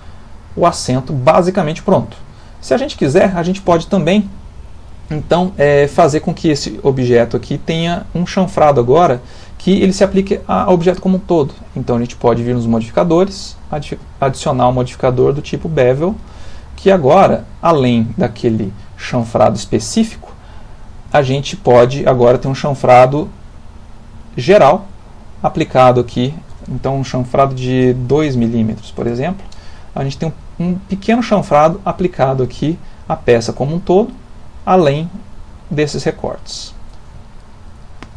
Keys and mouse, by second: 2.4 ctrl+middle click, 6.8 middle click, 8.7 middle click, 12.7 click, 13.5 click, 17.3 ctrl+middle click, 18.0 shift+middle click, 18.7 ctrl+middle click, 21.2 shift+click, 26.2 ctrl+click, 28.4 m, 30.3 middle click, 31.7 middle click, 33.9 middle click, 35.7 middle click, 37.2 ctrl+middle click, 37.4 ctrl+middle click.